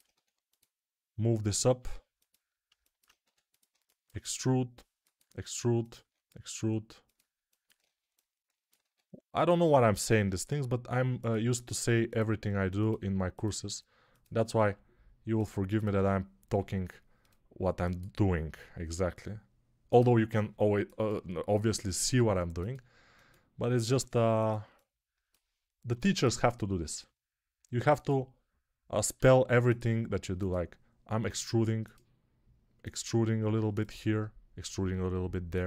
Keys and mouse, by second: 0.0 1, 1.5 g, 3.1 2, 4.2 e, 5.1 e, 5.9 e, 8.7 1, 10.0 g, 12.2 g, 13.5 click, 13.5 g, 14.5-18.4 middle drag, 14.5 g, 16.3 g, 18.4-24.5 drag, 18.4 g, 22.0 g, 23.8 g, 24.5-35.6 alt+middle drag, 25.8 2, 26.8 e, 29.0 e, 31.1 e, 33.3 1, 34.8 g.